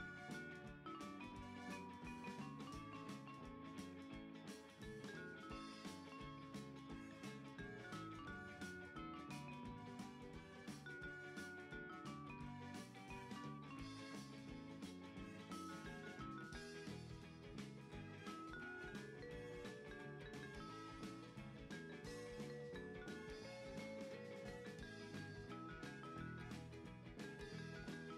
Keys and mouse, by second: 0.6 click, 1.4 KP_3, 2.4 s, 3.8 click, 3.9 g, 5.4 click, 5.5 r, 6.8 click, 7.6 KP_1, 8.9 s, 10.0 click, 10.2 KP_3, 11.0 click, 11.7 Tab, 14.3 g, 18.2 click, 18.4 Tab, 18.8 click, 19.7 g, 21.3 click, 22.2 right click, 22.8 click, 24.0 click, 26.9 click, 28.0 click.